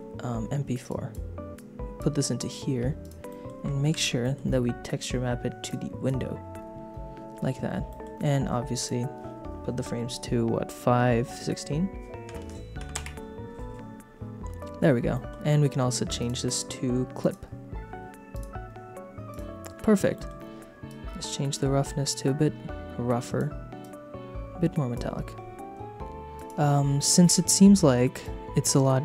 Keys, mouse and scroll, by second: 0.9 click, 1.5 click, 3.0 click, 3.2 middle click, 3.9 ctrl+t, 4.2 middle click, 5.6 click, 7.8 middle click, 8.7-13.3 drag, 15.1 middle click, 15.5 middle click, 16.1-17.6 drag, 18.3 click, 19.3 click, 20.1 middle click, 20.9-23.4 drag, 23.8-25.0 drag, 26.3 click, 27.0 click, 28.2 shift+click.